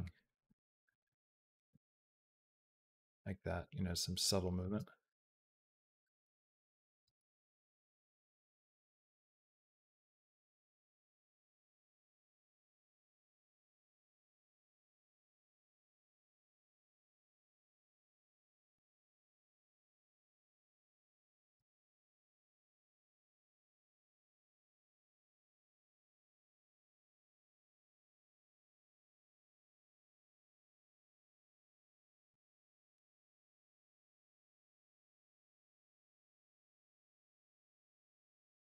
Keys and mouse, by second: 0.1 click, 0.3 g, 1.3 click, 1.5 g, 3.1-4.6 drag, 4.5 space, 6.9 space, 7.1 click, 7.4 space, 9.1 space, 9.5-13.1 drag, 13.8 click, 14.1 g, 16.5 click, 17.2 space, 18.6 space, 18.8 click, 19.0 space, 21.4 space, 21.7-23.6 drag, 25.6 click, 25.7 g, 27.6 click, 28.0 space, 32.1 space, 32.7 click, 33.2 click, 33.6 shift+click, 34.0 shift+click, 34.3 g, 35.5 click, 35.6 space, 38.1 space, 38.3 click.